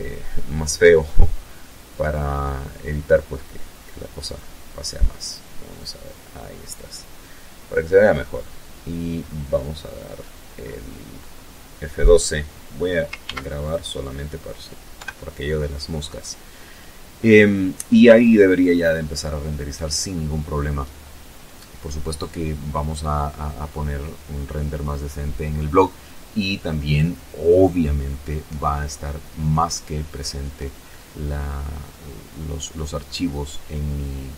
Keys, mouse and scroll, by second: 0.6 scroll down 2, 2.2 click, 7.4-9.1 scroll up 5, 11.2 ctrl+s, 11.6 ctrl+click, 12.9 F12.